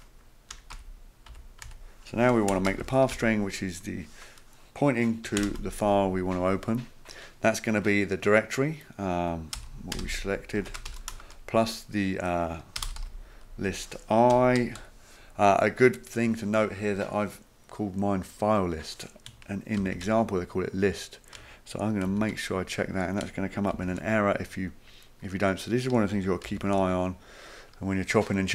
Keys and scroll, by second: 0.5 Return, 0.7 Up, 1.3 Tab, 1.6 Tab, 2.3-3.6 typing, 5.0-5.9 typing, 9.3-11.1 typing, 12.5-15.3 typing, 19.8 ctrl+c, 22.1 ctrl+v, 23.7 ctrl+v.